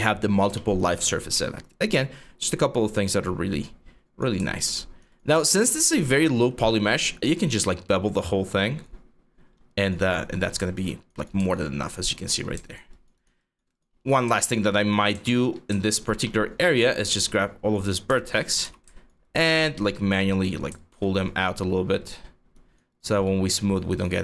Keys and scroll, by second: 1.0 ctrl+e, 9.2 3, 9.6 3, 13.6 1, 15.1 4, 17.5 5, 18.3 w, 20.6-21.8 typing.